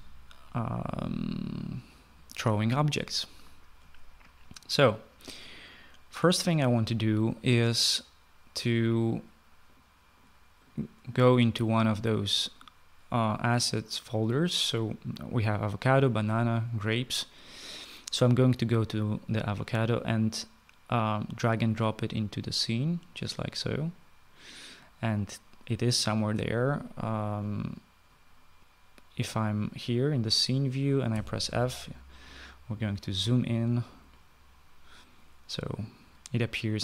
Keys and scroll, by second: 31.3 f.